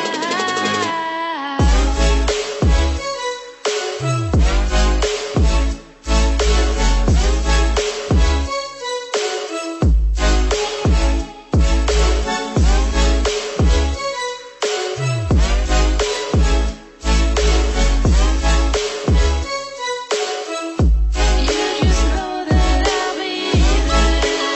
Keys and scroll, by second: 8.6 ctrl+-, 8.9 ctrl+0, 15.7 ctrl+=.